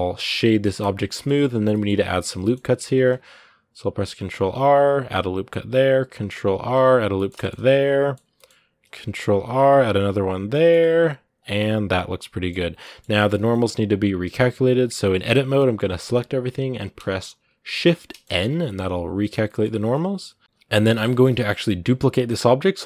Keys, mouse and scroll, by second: 0.6 w, 0.9 middle click, 1.8 Tab, 1.9-2.2 scroll up 1, 2.2 middle click, 2.7 ctrl+r, 4.9 ctrl+r, 6.9-8.6 shift+middle drag, 8.6 ctrl+r, 10.2 scroll up 1, 10.3 middle click, 10.6 Tab, 10.7 scroll down 2, 11.2 w, 11.4-12.5 middle drag, 12.5 scroll down 2, 12.6 middle click, 13.2-14.0 scroll up 2, 13.3 middle click, 14.0 middle click, 14.3 Tab, 17.8 middle click, 18.2 Tab, 18.4 middle click, 19.1 scroll down 2, 19.2 middle click, 19.5 scroll up 2, 19.7-22.7 middle drag, 22.7 shift+d.